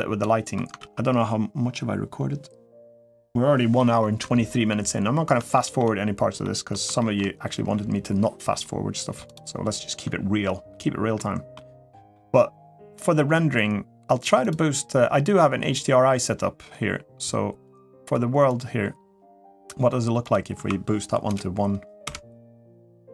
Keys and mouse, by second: 0.6 ctrl+s, 5.3 shift+middle drag, 6.2 middle click, 6.8 shift+middle drag, 11.0 middle click, 11.7 middle drag, 18.3 click, 20.1-21.4 drag.